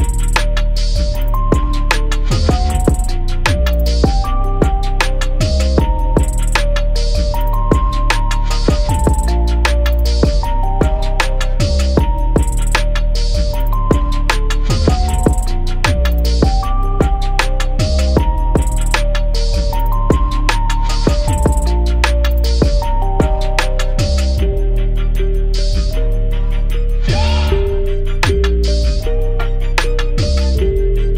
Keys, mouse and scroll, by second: 2.9 scroll down 1, 4.2 click, 5.2 KP_0, 5.7 click, 5.8 z, 6.1-14.8 drag, 15.9 z, 16.4 click, 25.3-25.8 typing, 26.6 click.